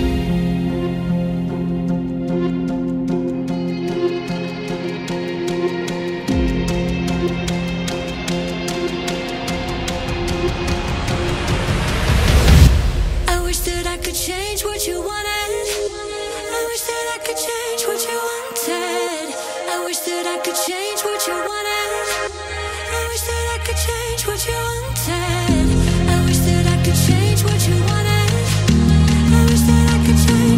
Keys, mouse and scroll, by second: 0.3 Tab, 0.8 click, 1.1-1.6 scroll down 4, 1.6 click, 4.6 shift+click, 6.4 ctrl+j, 9.9-10.4 scroll down 1, 10.4-10.9 scroll up 8, 10.9-11.3 middle drag, 11.3 scroll up 4, 12.2 Tab, 12.8-15.8 middle drag, 18.0-18.5 scroll up 3, 18.5-20.1 scroll down 9, 20.1 ctrl+z, 20.9 ctrl+z, 22.5-25.3 middle drag, 25.3 ctrl+z, 26.9 click, 27.7 click, 29.2-30.2 scroll down 5, 30.2 click.